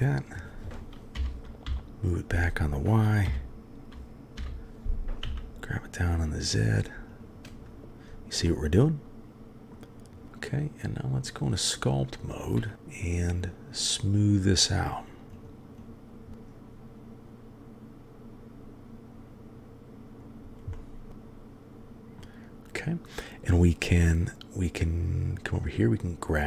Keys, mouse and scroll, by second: 1.1 g, 3.2 f, 5.2 g, 8.4-9.4 middle drag, 9.4 click, 10.2-11.3 drag, 12.7 f, 13.2 click, 14.1-14.6 drag, 15.3 drag, 15.8 click, 16.3-20.2 drag, 20.7 middle click, 21.2 click, 21.6 middle click, 22.1 click, 25.5 click.